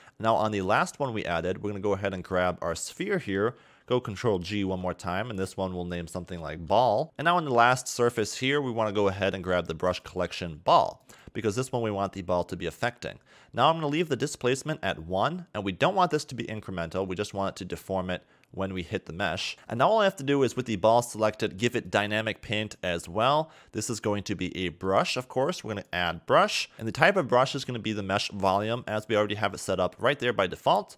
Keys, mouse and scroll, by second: 0.4 click, 2.3 click, 4.6 ctrl+g, 5.3 click, 7.0-8.4 scroll down 8, 8.4-9.9 scroll down 5, 9.9 click, 18.7 click, 19.5 click, 21.8 click, 23.9 click, 25.7 click, 26.6 scroll down 3, 26.8 click.